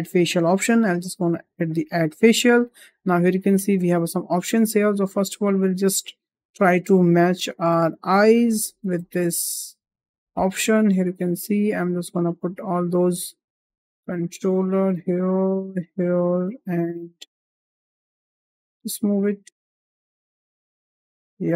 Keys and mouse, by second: 1.4 click, 3.1 shift+middle click, 4.3 shift+middle drag, 5.5 click, 6.2 l, 7.3 g, 8.6 s, 10.9 shift+middle click, 11.5 click, 12.5 g, 13.7 click, 14.0 g, 15.0 click, 15.4 g, 16.4 click, 16.7 g, 17.3 click, 18.2 g, 19.5 drag, 19.8 g, 21.1 drag.